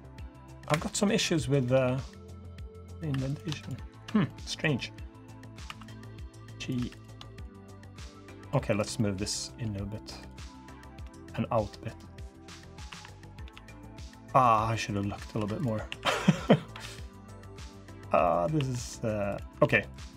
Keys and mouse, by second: 0.6 Escape, 0.7 middle click, 1.5 g, 2.8 3, 3.6 shift+click, 4.0 middle click, 5.1 middle click, 5.4 2, 6.5 3, 7.7 click, 8.7 click, 9.1 g, 10.3 2, 10.8 g, 11.9 click, 12.6 1, 13.2 g, 14.4 click, 15.1 2, 15.6 1, 16.2 click, 16.5 g, 18.0 click, 18.3 1, 19.3 alt+z.